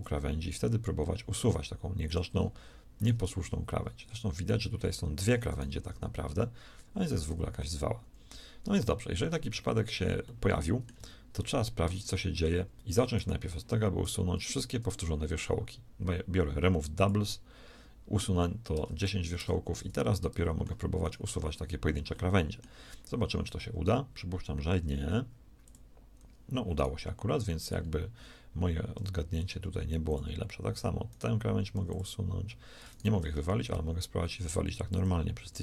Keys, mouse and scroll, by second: 3.3 g, 5.9 g, 13.1 a, 14.4 a, 14.4 w, 18.7 Tab, 19.3 Tab, 19.7 z, 24.6 x, 26.7-27.7 drag, 28.9 x, 31.0 click, 31.7 x.